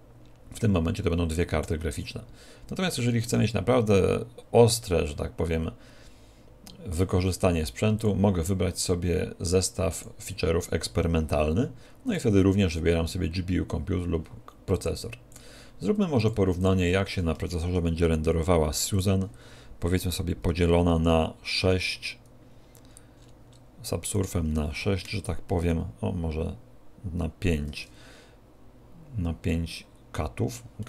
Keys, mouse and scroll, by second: 8.0 click, 12.1 click, 15.3 click, 17.5 shift+a, 20.9 ctrl+6, 22.8-24.1 scroll up 9, 24.1 right click, 24.1-25.1 scroll up 1, 25.1 ctrl+6, 25.8 ctrl+5, 29.6 middle click.